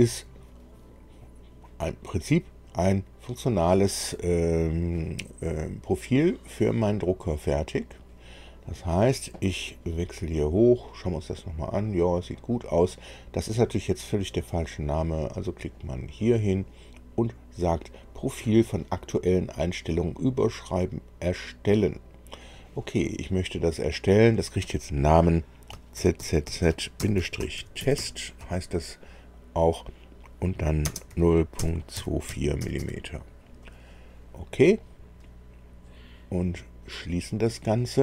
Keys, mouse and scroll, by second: 7.9-8.9 drag, 15.7 click, 22.4 click, 25.9-27.9 typing, 30.8-32.8 typing, 34.8 click, 37.1 click.